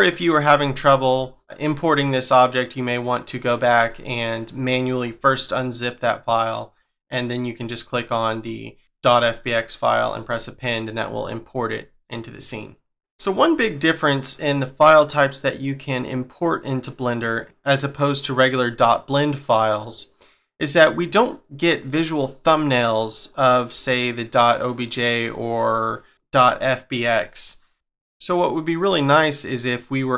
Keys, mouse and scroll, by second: 0.2-1.6 scroll down 1, 1.6 scroll down 1, 2.7-4.9 scroll up 1, 6.7-7.1 scroll down 2, 7.1-8.8 scroll up 1, 8.8-10.1 scroll up 3, 14.4-16.5 scroll down 1, 17.4-18.1 scroll down 1, 18.1 scroll up 2, 23.3-23.7 scroll down 2, 23.7 scroll up 2, 25.7-26.1 scroll down 3, 26.1-26.4 scroll up 4.